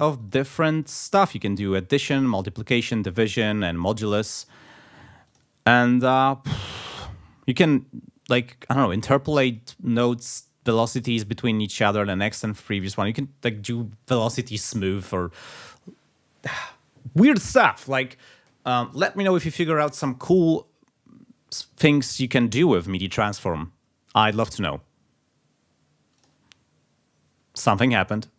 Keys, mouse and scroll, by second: 0.2-1.3 drag, 3.7 click, 4.3 click, 5.2 click, 5.8 click, 8.8 click, 9.4 click, 12.7 click, 26.2 click, 28.3 space.